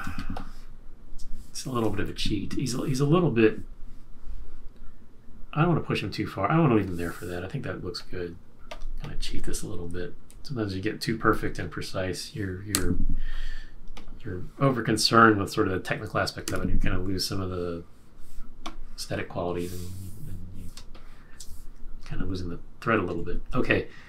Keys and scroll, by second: 0.0 space, 2.0 super+-, 12.7 F6, 16.4 F6, 20.7 space, 22.0 shift+Up, 23.2 shift+Up.